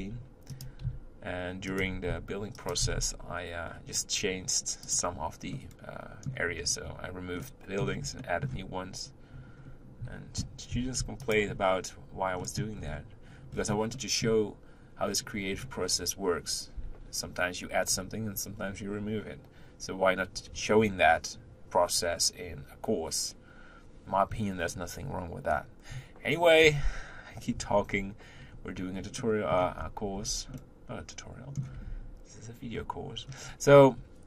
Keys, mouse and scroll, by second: 0.8 s, 1.8 g, 2.8 s, 5.5-6.6 middle drag, 6.6-7.4 scroll up 1, 7.4-8.9 middle drag, 8.9 scroll up 2, 9.6 scroll up 2, 10.7 g, 12.4 middle click, 12.8-13.5 scroll up 3, 13.5 scroll up 1, 13.5-13.9 scroll down 2, 13.9-15.1 middle drag, 15.1-16.6 scroll up 5, 27.9-28.5 scroll down 3, 28.5-28.8 scroll up 2, 29.2 middle click, 29.8-30.1 scroll down 2, 30.1 Tab, 30.5-31.9 middle drag, 31.9 Tab, 32.7-34.2 scroll down 4.